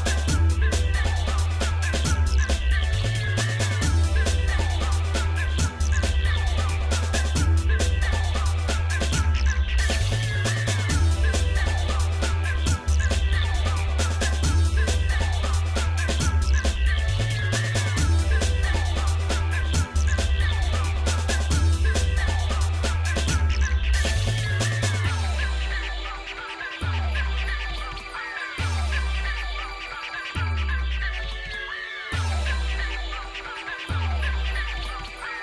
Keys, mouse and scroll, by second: 0.2 scroll down 1, 1.5 click, 2.6 ctrl+click, 8.2 click, 8.4 ctrl+right click, 10.7 g, 16.5 click, 17.2 ctrl+right click, 18.8 Delete, 20.5 middle click, 21.3-22.1 scroll up 3, 22.1 click, 22.7 shift+middle click, 23.7 g, 26.6 click, 27.9 shift+click, 29.3 g, 33.0 shift+middle click, 34.5 click, 34.9 shift+middle click.